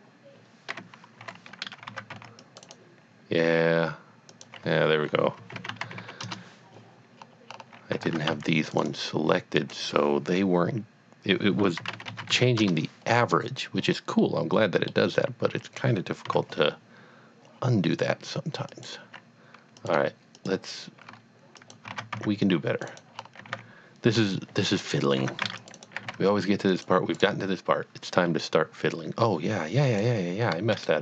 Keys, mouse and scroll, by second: 1.2 KP_3, 2.2 c, 2.5 click, 2.6 right click, 4.3 click, 5.4 KP_Decimal, 5.5 KP_5, 5.9 KP_Decimal, 5.9 KP_5, 6.2 KP_Enter, 7.2 scroll, 7.2-7.8 scroll up 3, 8.1 a, 8.5 click, 8.8 right click, 9.6 click, 11.8 KP_Decimal, 11.9 KP_5, 12.1 Tab, 12.3 KP_5, 13.2 KP_Enter, 13.8 scroll down 1, 14.3 middle click, 14.7 middle click, 15.2 middle click, 16.3 KP_1, 17.5 scroll down 1, 18.7 click, 19.9 click, 20.4 shift+click, 21.1 click, 22.2 c, 22.4 click, 22.8 click, 22.9 right click, 23.1 scroll up 1, 23.5 g, 23.8 x, 24.8 click, 25.2 alt+a, 25.5 c, 25.6 click, 25.7 right click, 26.0 g, 26.1 z, 26.7 click, 27.1 right click, 30.0 click, 30.7 shift+click.